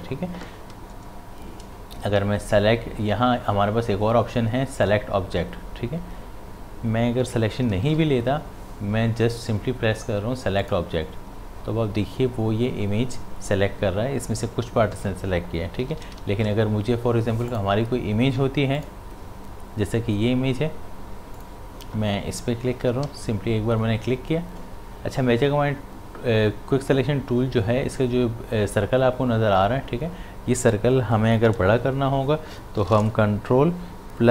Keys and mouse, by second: 7.7 click, 7.9 ctrl+d, 10.6 click, 15.7 click, 15.8 ctrl+d, 16.0 v, 17.5 click, 21.4 click, 22.6-23.6 typing.